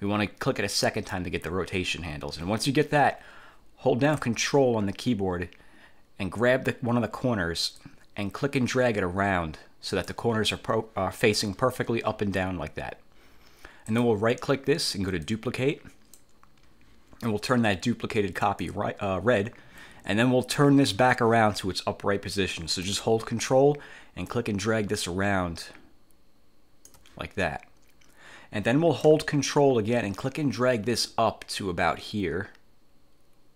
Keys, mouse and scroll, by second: 0.8 click, 7.9-10.4 ctrl+drag, 14.0 click, 15.4-16.4 drag, 18.6 click, 24.4-27.2 ctrl+drag, 30.3-33.5 ctrl+drag.